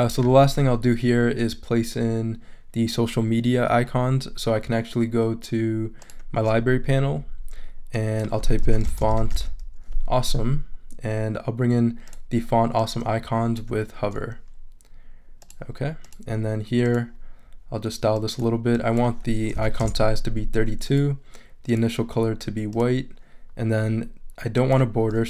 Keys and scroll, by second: 8.4-9.8 typing, 19.3-20.1 typing.